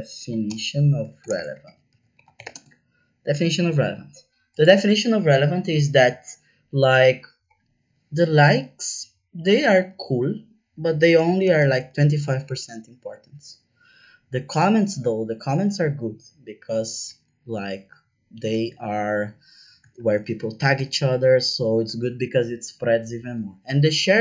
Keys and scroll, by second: 0.0-2.9 typing, 11.1 KP_2, 11.3 KP_5, 11.6 shift+5, 11.8 Return, 18.4 KP_4, 18.5 KP_0, 19.9 shift+5, 20.7 Return.